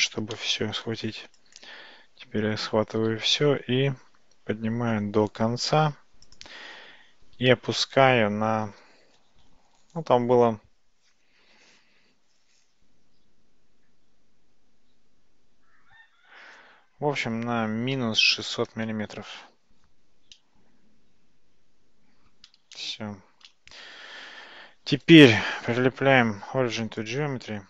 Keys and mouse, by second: 0.4 middle click, 3.4 g, 20.4 Tab, 20.4-22.4 middle drag, 22.8-23.5 shift+middle drag, 25.2-27.2 right drag.